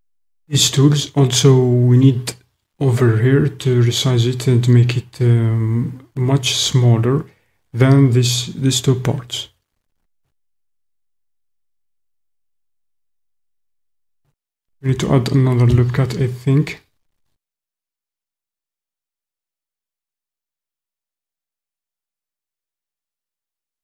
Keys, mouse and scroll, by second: 15.6 ctrl+r.